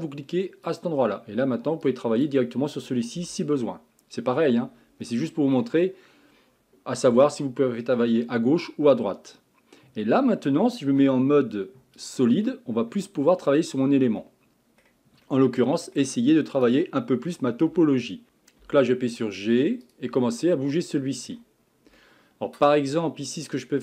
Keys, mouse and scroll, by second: 0.7 click, 1.8 click, 3.2 g, 5.0 middle click, 5.8 scroll down 1, 7.1 KP_1, 10.9 z, 12.5-16.5 middle drag, 16.5 click, 17.7 g, 18.4 shift+middle click, 18.6 g, 20.2-23.8 middle drag.